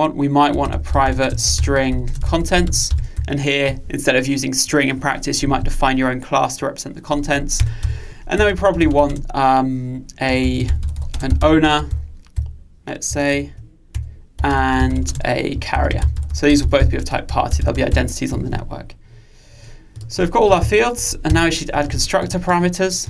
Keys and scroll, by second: 13.3 alt+Return, 20.7 alt+Return, 21.4 alt+Return.